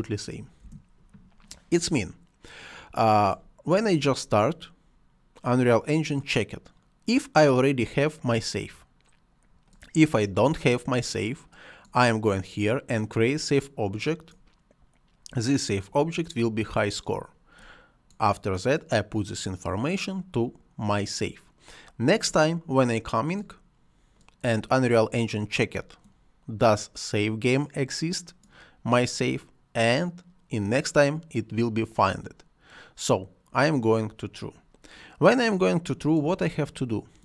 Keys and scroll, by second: 0.5 Return.